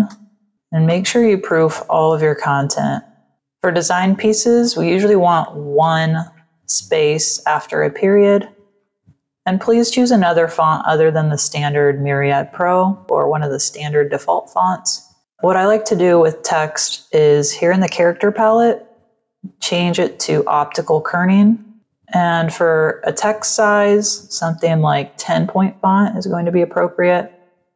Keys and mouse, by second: 0.4 click, 0.8 Delete, 1.4 Down, 2.0 End, 3.1 End, 4.5 click, 5.7 BackSpace, 7.2 click, 7.7 ctrl+click, 8.5 v, 8.7 click, 11.8 click, 15.2 shift+click, 18.5 click, 20.5 click, 23.0 click, 23.9 click.